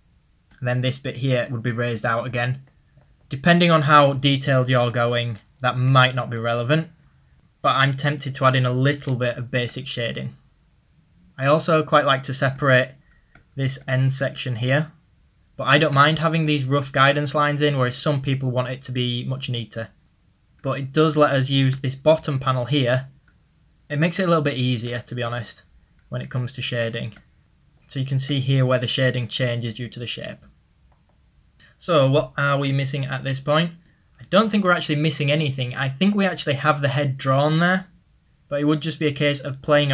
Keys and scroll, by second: 2.5 ctrl+z, 16.3 typing, 18.6 typing, 27.4 typing, 30.4 ctrl+z.